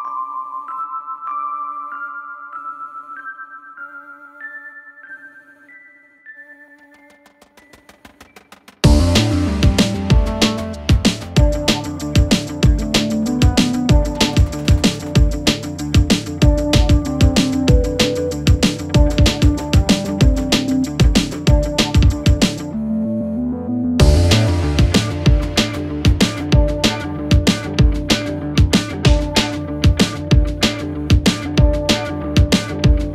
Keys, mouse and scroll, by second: 0.1 right click, 1.4 click, 6.0 click, 8.0-12.5 drag, 12.8-33.1 drag.